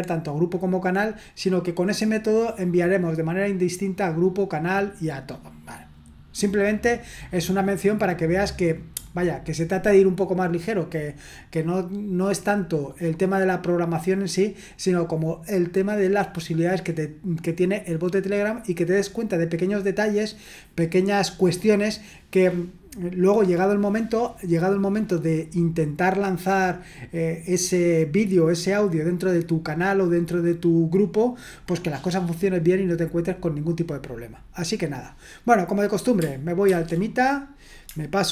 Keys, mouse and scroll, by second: 36.7 ctrl+1.